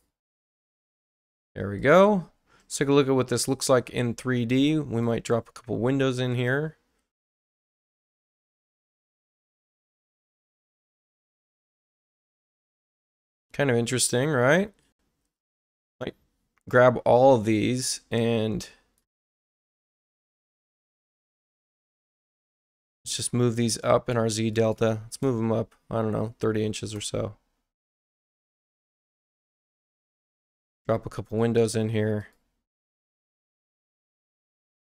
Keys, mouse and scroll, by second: 1.8 click, 5.0 click, 8.4 x, 12.7 click, 12.7 right click, 13.4 space, 15.8 click, 17.5 space, 18.1 click, 20.2 ctrl+click, 23.0 click, 24.5 click, 26.4 3, 26.9 Return, 28.5 click, 31.2 click, 32.1 click, 33.9 right click.